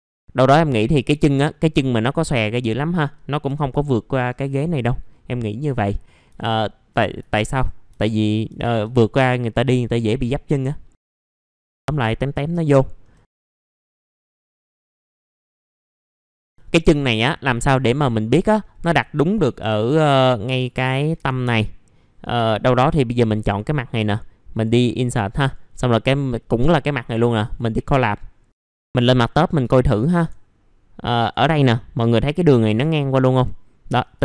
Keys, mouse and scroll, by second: 0.3 middle click, 0.5-1.1 scroll down 1, 1.1 scroll up 1, 1.5 alt+middle click, 2.0-3.5 scroll down 1, 3.5 typing, 4.1-5.1 scroll down 1, 6.4 alt+middle click, 6.9 scroll down 1, 7.3 alt+middle click, 7.9 alt+middle click, 8.9 scroll down 1, 10.2-10.9 scroll up 1, 10.9 middle click, 11.7 scroll up 1, 12.0 middle click, 12.5 scroll down 1, 12.7 alt+scroll up 1, 12.8 middle click, 13.2 scroll up 1, 13.5 alt+middle click, 13.8 scroll down 1, 14.0 middle click, 14.3-14.8 scroll up 1, 15.7 middle click, 16.2 alt+middle click, 16.5 alt+middle click, 17.9 click, 18.6 alt+middle click, 20.4 F3, 20.8 middle click, 22.3 4, 22.6 click, 23.1 F3, 23.4 right click, 24.5 click, 25.4 right click, 27.4 click, 28.5 middle click, 29.3 scroll up 1, 30.2-30.5 scroll up 1, 31.2 click, 32.3 ctrl+click, 32.5 ctrl+click, 34.1 ctrl+click.